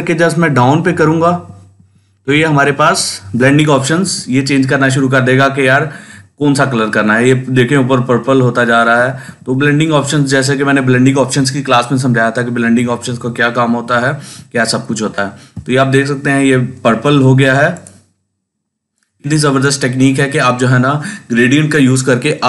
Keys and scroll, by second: 0.3 Down, 1.1 Down, 1.6 Down, 2.2 Down, 2.6 Down, 3.2 Down, 3.6 Down, 3.9 Down, 4.3 Down, 4.8 Down, 7.6 shift+Down, 8.2 shift+Down, 8.6 Up, 8.8 Down, 9.1 Down, 9.6 Down, 9.9 Down, 10.3 Down, 10.8 Up, 11.3 Down, 11.8 Up, 13.5 Down, 14.2 Down.